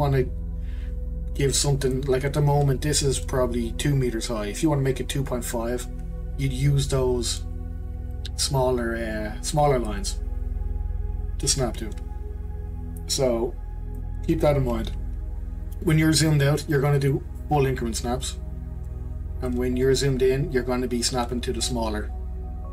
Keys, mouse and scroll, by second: 8.1 click, 14.9-15.7 scroll down 5, 15.7-16.6 scroll down 2, 16.6-17.1 scroll down 1, 17.1 click, 19.8-22.0 scroll up 7, 22.0-22.7 scroll up 1.